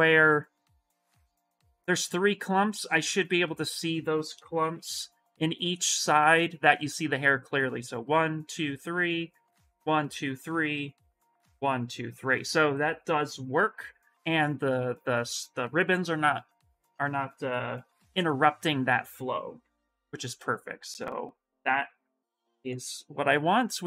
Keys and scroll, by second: 4.5 shift+m, 17.8 shift+m, 19.4 ctrl+n.